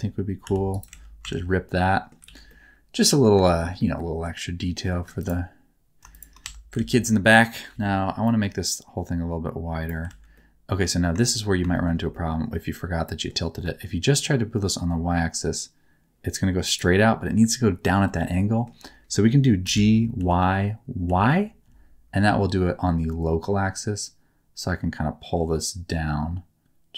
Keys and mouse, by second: 0.4 v, 0.6 click, 0.8 alt+z, 1.1 Tab, 1.7 middle click, 2.2 alt+a, 2.4 middle click, 3.4 shift+middle click, 3.8-4.8 middle drag, 5.1 middle click, 6.1 shift+middle click, 6.4 Tab, 6.7 alt+z, 7.6 KP_7, 7.7 alt+a, 7.7 1, 7.7 b, 10.0 alt+z, 10.3 middle click, 11.1 shift+middle click, 11.7 shift+middle click, 12.0-13.2 middle drag, 13.5 g, 18.2 shift+middle click, 19.6 g, 20.1 y, 21.0 y.